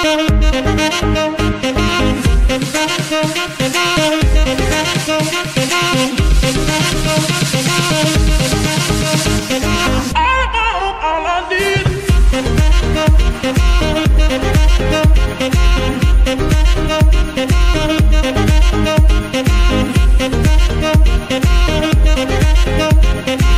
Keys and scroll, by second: 1.7 shift+g, 2.2 shift+Escape, 2.9 g, 3.4 Escape, 4.1 g, 4.9 Escape, 5.6 g, 6.9 Escape, 22.3 KP_3, 22.5 Return, 23.1 ctrl+c.